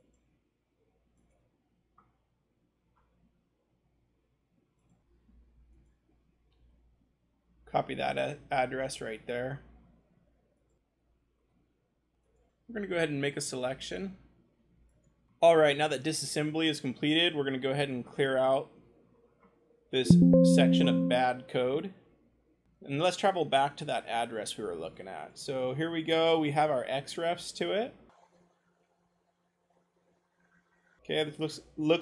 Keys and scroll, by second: 1.8-5.0 scroll, 9.4 ctrl+shift+c, 10.7 scroll, 10.9 g, 12.5-15.3 scroll, 18.0-21.4 scroll, 22.6 ctrl+c, 22.6 g, 24.8 ctrl+v.